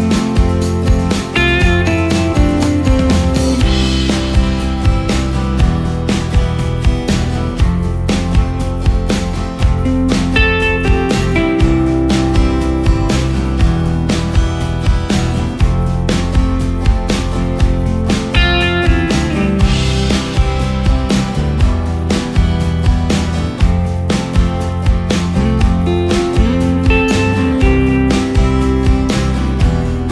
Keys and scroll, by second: 29.7 ctrl+space.